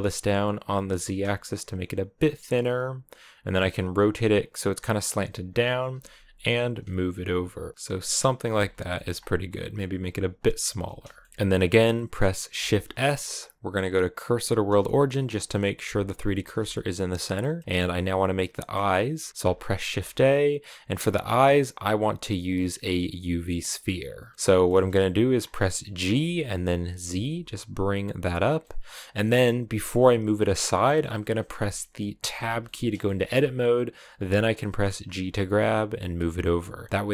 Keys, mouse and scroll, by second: 3.4 r, 5.1 g, 6.5-8.4 typing, 8.4-8.7 scroll down 2, 8.7 shift+middle click, 9.0-9.4 scroll up 1, 9.4 right click, 9.9 s, 10.3 g, 10.7 a, 10.7 scroll down 1, 11.0 shift+middle click, 11.2 scroll up 1, 11.3 a, 14.5 shift+s, 14.9 middle click, 15.4 click, 16.4 shift+s, 17.2-18.5 middle drag, 18.5 scroll up 1, 18.5-23.1 middle drag, 24.1 middle click, 24.5-25.2 scroll down 2, 25.2-25.9 scroll up 2, 25.9 g, 28.4-32.2 middle drag, 32.2 Tab, 32.4-33.9 middle drag, 33.9-34.4 scroll up 2, 34.4 middle click, 34.9 g.